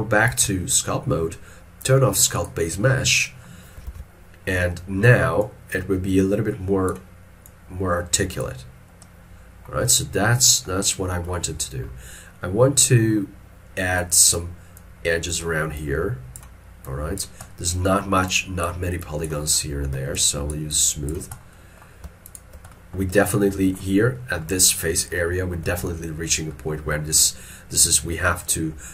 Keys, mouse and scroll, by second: 0.4 ctrl+Tab, 4.0 alt+e, 4.2 scroll up 1, 8.8 scroll down 1, 20.2 shift+click, 20.7 shift+click, 21.4 scroll down 1, 22.3 shift+click, 23.5 alt+middle click, 25.7 middle click, 26.8 middle click.